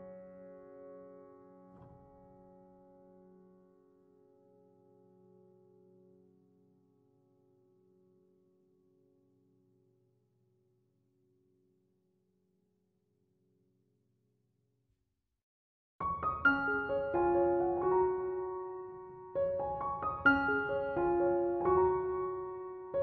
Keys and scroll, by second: 2.5 BackSpace, 4.6-5.3 typing.